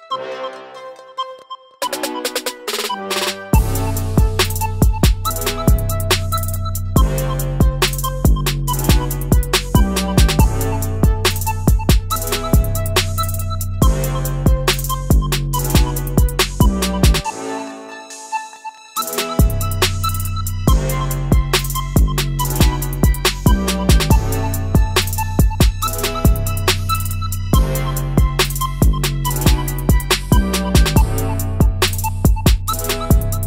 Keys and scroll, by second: 6.8 ctrl+z, 7.0 ctrl+z, 32.2 ctrl+z.